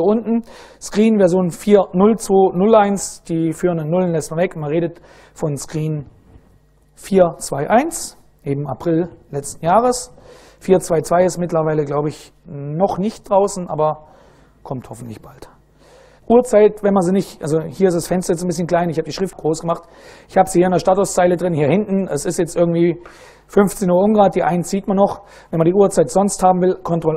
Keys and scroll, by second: 5.9 ctrl+a, 6.4 ctrl+v, 16.2 super+Right, 26.4 ctrl+a.